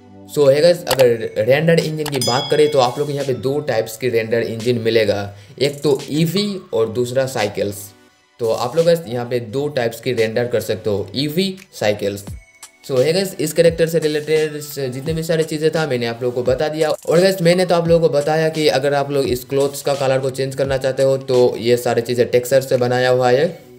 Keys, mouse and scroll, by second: 0.0 z, 0.4 click.